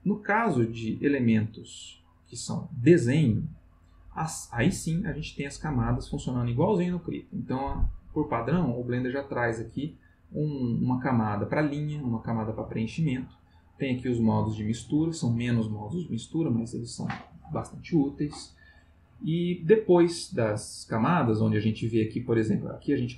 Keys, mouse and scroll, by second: 5.5 click, 6.0 click, 6.9 click, 12.2 click, 13.9 click, 22.5 click.